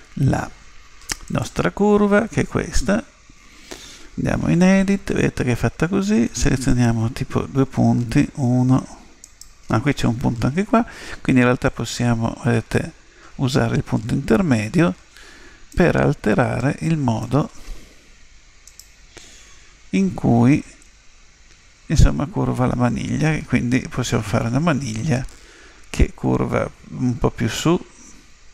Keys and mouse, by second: 1.2 click, 4.6 Tab, 6.7-8.4 right drag, 9.2-11.1 right drag, 11.7 click, 13.4 click, 16.6 click, 18.6 right click, 20.5 right click, 20.9 g.